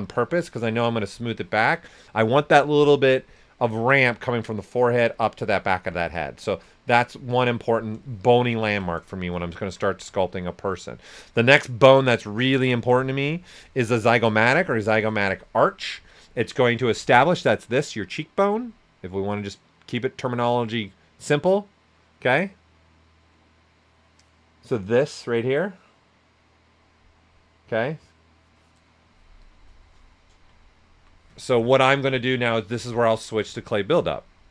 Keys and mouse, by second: 6.0 s, 6.1 click, 8.6 ctrl+right click, 10.3 click, 11.0-17.9 shift+drag, 30.6 alt+right click, 32.3-33.4 typing, 33.5-34.5 drag.